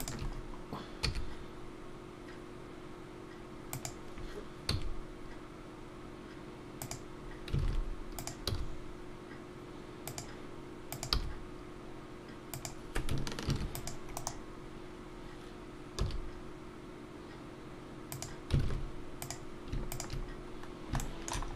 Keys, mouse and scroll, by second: 0.4 shift+click, 0.4 scroll down 1, 0.4 g, 1.0 e, 7.6 alt+a, 8.1 click, 8.5 g, 10.9 click, 11.1 g, 13.5 ctrl+r, 16.0 s, 18.6 alt+a, 19.2 click, 19.9 shift+click, 20.7 scroll down 1, 21.0 shift+middle click, 21.4 scroll up 1.